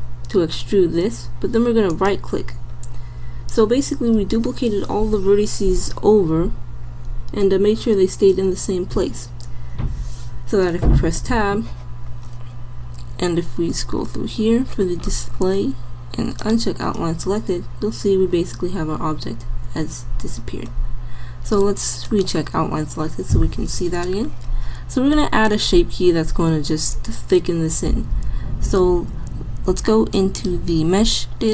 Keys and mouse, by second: 3.1 click, 9.6 click, 11.2 Tab, 18.2 middle click, 23.9 middle click, 30.1-31.5 drag.